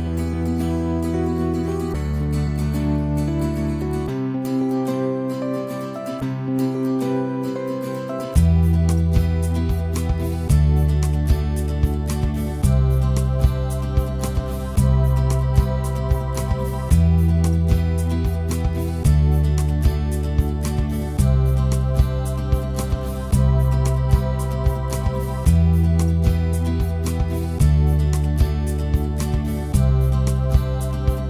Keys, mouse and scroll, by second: 0.0 c, 0.6-3.3 drag, 3.3 f, 3.5 f, 3.8-5.0 drag, 5.0 ctrl+z, 5.2 alt+click, 5.6-11.4 right drag, 11.4-12.4 drag, 12.4 alt+middle click, 12.8 ctrl+z, 13.1 click, 13.7 right click, 14.2 ctrl+z, 14.5-15.5 right drag, 15.5 click, 16.4 ctrl+z, 18.8 click, 19.4 ctrl+z, 19.6-21.6 right drag, 21.6 alt+middle click, 22.1-23.8 drag, 23.8-25.9 right drag, 25.9-27.0 drag, 27.0 alt+middle click, 27.3-29.3 alt+drag, 29.3 right click, 30.0 alt+middle click, 30.2 alt+click, 30.4 alt+middle click, 30.6 alt+click, 30.7 alt+middle click, 30.9-31.2 drag.